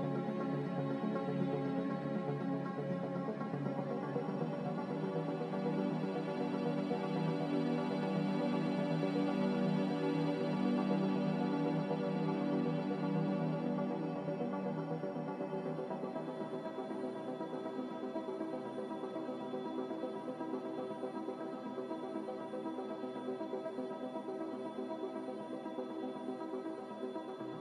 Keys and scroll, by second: 1.3 4, 1.3 5, 8.0 1, 8.1 0, 8.3 Return, 19.4 1, 19.4 0, 19.9 BackSpace, 20.0 5, 20.2 Return, 23.0-23.7 typing, 27.2 c.